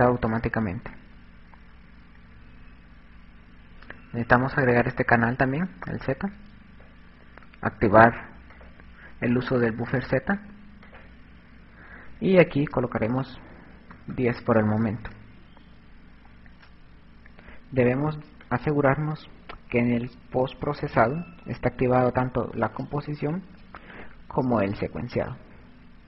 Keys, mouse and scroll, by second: 0.5-2.2 scroll up 5, 2.2-3.0 scroll up 10, 3.0-4.2 scroll down 3, 5.1 click, 8.6 click, 11.0 click, 18.6 click, 22.9 click, 24.0 click.